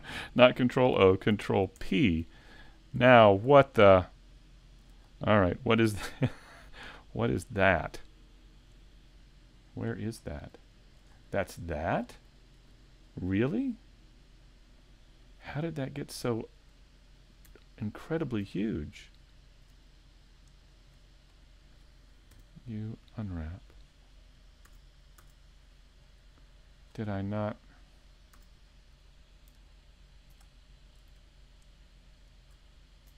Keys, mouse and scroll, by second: 1.8 ctrl+p, 8.6 click, 8.6 right click, 8.6-8.9 scroll down 2, 10.2-10.6 scroll up 2, 10.6 shift+middle click, 11.1-11.7 scroll up 4, 11.5 middle click, 12.4 shift+middle click, 13.0 scroll up 1, 14.4 middle click, 16.3 shift+middle click, 16.5 shift+middle click, 18.1 alt+right click, 18.8 middle click, 20.6 shift+right click, 21.0-21.4 scroll down 2, 21.4 middle click, 25.2-25.6 scroll down 2, 25.2 a, 26.1 scroll down 1, 26.4 shift+middle click, 27.1-27.5 scroll up 4, 27.5 middle click, 28.4 a, 29.7 alt+middle click, 30.5 shift+middle click, 32.1 alt+right click.